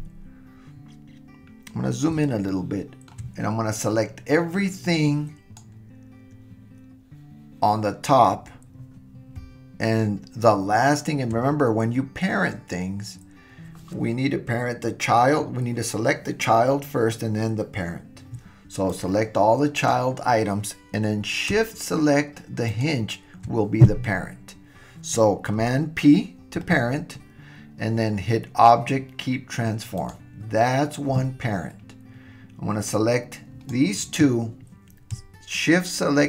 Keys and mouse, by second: 2.5-3.1 shift+middle drag, 3.8-6.3 drag, 18.9-21.4 drag, 22.7 shift+click, 26.6 super+p, 32.9-33.9 drag.